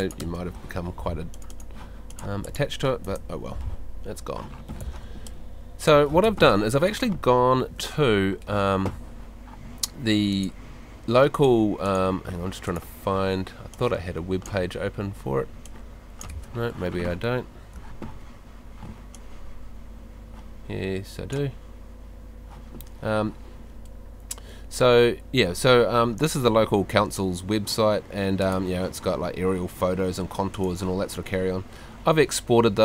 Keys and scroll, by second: 0.2 BackSpace, 3.0 BackSpace, 4.8 Escape.